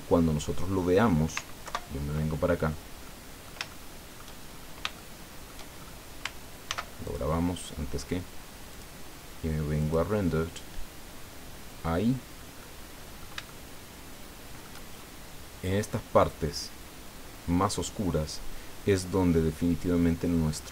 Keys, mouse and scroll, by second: 1.6 ctrl+Right, 3.0 click, 4.2 shift+click, 4.4-4.8 shift+scroll up 4, 4.9 shift+middle click, 5.8-6.1 shift+scroll up 2, 6.7 ctrl+s, 7.0 ctrl+click, 8.7 click, 9.8 click, 12.0 scroll down 2, 12.6 click, 13.5-14.8 shift+drag, 14.9 shift+scroll up 1.